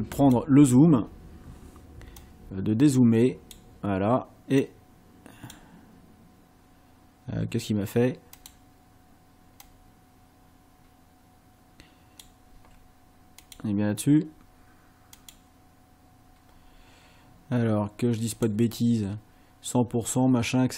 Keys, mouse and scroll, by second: 0.2 click, 2.2-3.7 drag, 4.6 click, 8.4 click, 9.6-12.4 drag, 13.4 click, 15.2 click, 18.4 click.